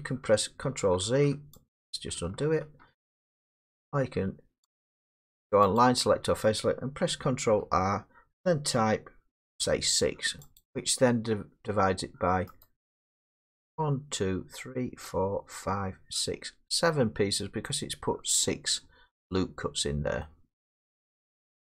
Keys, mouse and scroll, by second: 0.0 click, 0.3 ctrl+z, 1.2 ctrl+z, 1.2 click, 1.7 click, 2.2 middle click, 2.5 ctrl+z, 4.7 click, 5.8 click, 7.4 ctrl+r, 9.5 6, 10.6 click, 12.6 right click.